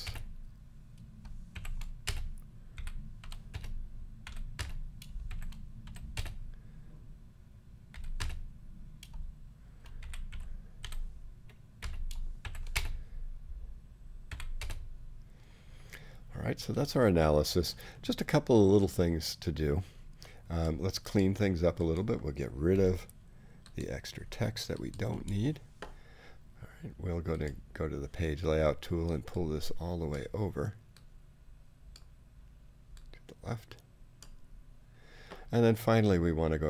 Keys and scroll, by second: 0.0 space, 1.5-6.1 typing, 7.9-14.6 typing, 22.7 BackSpace, 24.2 BackSpace.